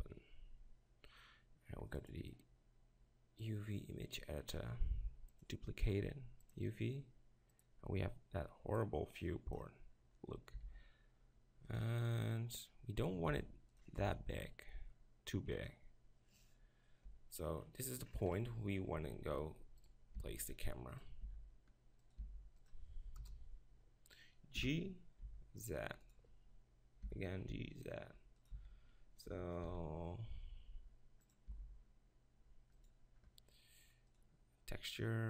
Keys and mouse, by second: 0.0-1.0 drag, 2.4-4.6 drag, 5.3-7.2 drag, 7.5-10.6 drag, 10.6 s, 11.8-13.4 drag, 13.4 s, 14.0 g, 14.1 click, 14.3 click, 14.5 click, 15.9 click, 16.5 click, 17.1 Tab, 19.2 z, 20.2 g, 21.0 click, 21.2 r, 22.0 click, 22.2 g, 23.2 KP_0, 23.4-24.4 drag, 24.5 g, 26.1-26.5 drag, 27.0 g, 28.5 z, 29.7 shift+f, 31.4 click, 31.5 g.